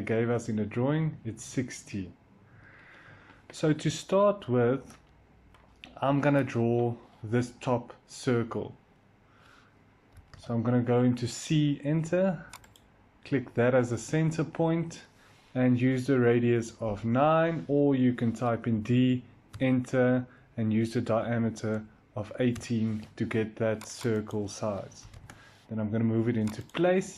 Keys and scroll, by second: 0.0-0.1 typing, 10.0 c, 18.6 d, 19.4 Return, 20.7-21.7 typing, 22.4 Return, 24.9 m.